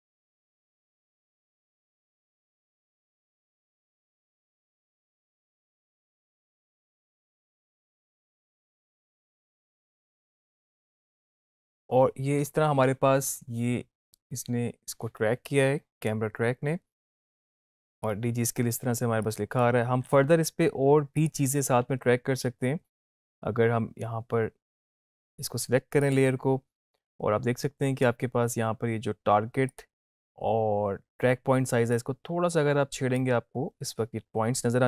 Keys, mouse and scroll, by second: 10.6 space, 11.1-18.4 drag, 26.1 click, 29.8-33.3 drag.